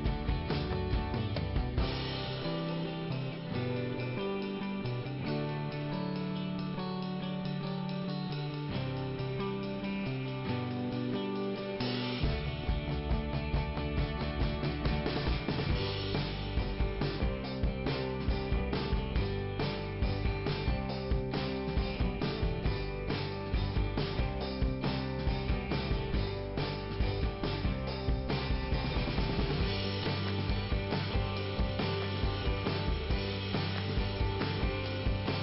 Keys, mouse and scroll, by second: 6.3 click, 7.6 click, 8.1 click, 9.5 click, 13.3 click, 13.4 click, 14.1 middle click, 14.9-15.4 scroll up 1, 15.4 click, 16.6 click, 20.4 click, 22.7 click, 29.4 click, 30.5 click, 32.3 click, 32.3 click, 33.1 middle click, 34.3 middle click.